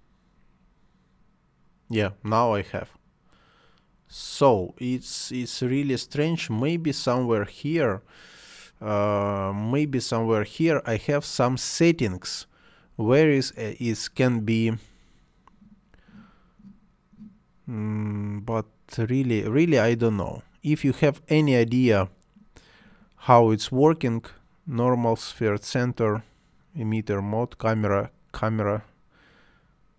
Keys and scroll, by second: 4.1 space.